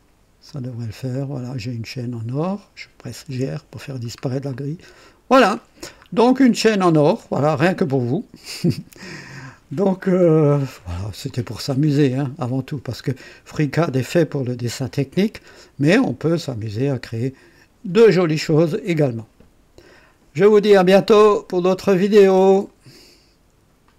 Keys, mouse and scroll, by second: 0.5 click, 1.1 click, 2.9-3.8 typing, 3.9 scroll down 2, 4.5 click, 6.0 scroll up 2, 6.9 scroll down 1, 7.5-9.6 drag, 10.2 right click, 11.3-14.2 drag, 14.4 right click, 16.3-18.0 drag, 16.3 typing, 22.7 right click, 23.9 click.